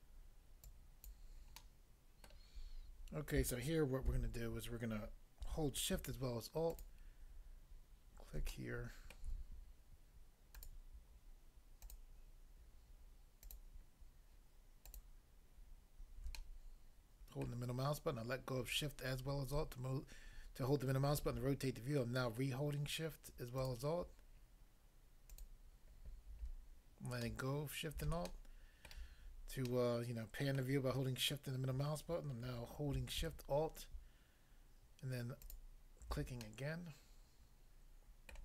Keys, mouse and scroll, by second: 0.7 click, 1.1 click, 1.6 middle click, 2.3 middle click, 4.0 a, 6.7 alt+click, 8.5 middle click, 9.1 middle click, 10.6 alt+click, 10.7 alt+click, 11.8 alt+click, 11.9 alt+click, 13.4 alt+click, 13.5 alt+click, 14.9 alt+click, 15.0 alt+click, 16.3 middle click, 17.5 middle click, 23.6 alt+click, 25.3 alt+click, 27.2 middle click, 28.1 middle click, 28.3 shift+middle click, 30.6 middle click, 35.5 alt+click, 36.5 middle click, 38.3 middle click.